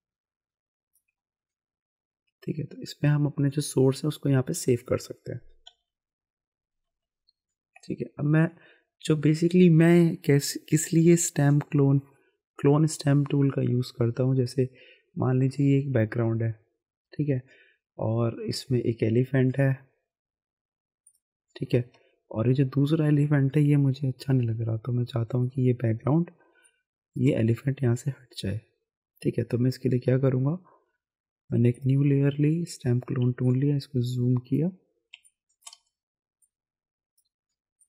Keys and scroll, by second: 26.5 space, 33.1 z, 35.1 space, 35.7 z.